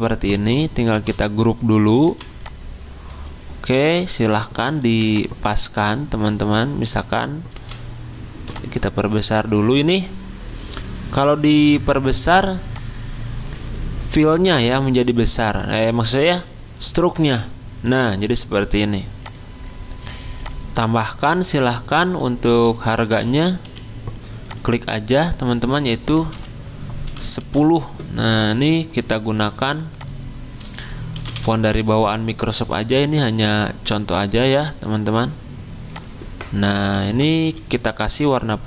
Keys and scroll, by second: 0.9 ctrl+g, 2.1 v, 3.5 v, 4.9 r, 8.5 v, 23.6 typing, 25.9-26.6 typing, 27.4 ctrl+a, 30.9-31.9 typing, 35.1-35.9 typing, 38.2 d.